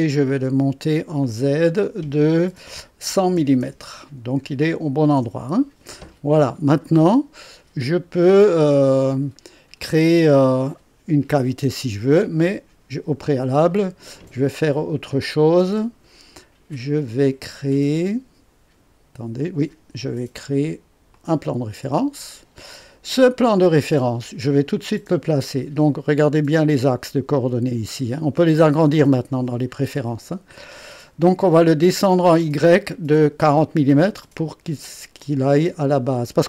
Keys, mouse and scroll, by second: 1.2 click, 3.0 1, 3.3 KP_0, 3.6 KP_0, 5.1 Return, 6.8-8.8 drag, 21.1 click, 23.5 click.